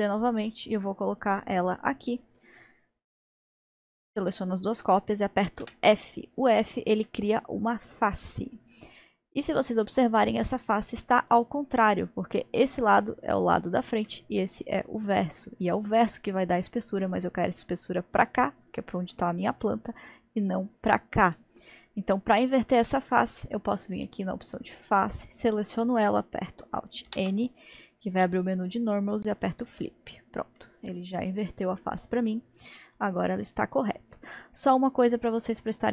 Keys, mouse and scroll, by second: 1.7-2.1 scroll down 1, 3.7 shift+click, 4.3-5.7 middle drag, 5.7 f, 7.1-10.1 middle drag, 14.1-17.2 middle drag, 19.7-23.5 middle drag, 23.5 click, 24.7 click, 27.1 alt+n, 30.2-30.6 scroll down 1, 30.6-33.7 middle drag, 33.7 click, 35.4 click, 35.8-35.9 scroll up 2.